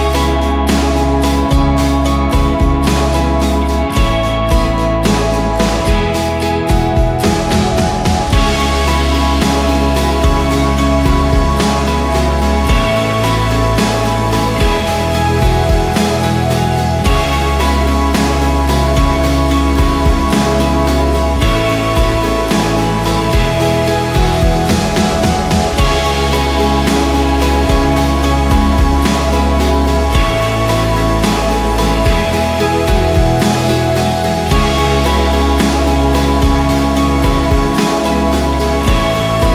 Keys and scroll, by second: 3.7 Return, 5.8-7.2 typing, 8.1 ctrl+g, 8.8-16.2 typing, 18.0 ctrl+j, 20.9 BackSpace, 21.2 Return, 23.6 Return, 27.4 Return, 31.9-33.7 typing.